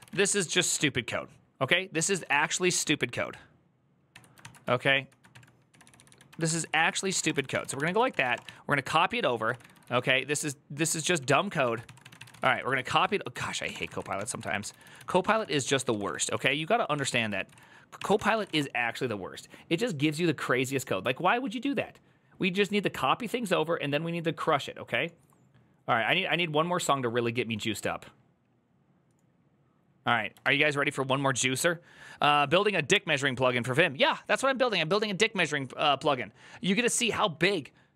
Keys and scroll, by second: 0.0-2.6 typing, 3.9 shift+Tab, 3.9-17.6 typing.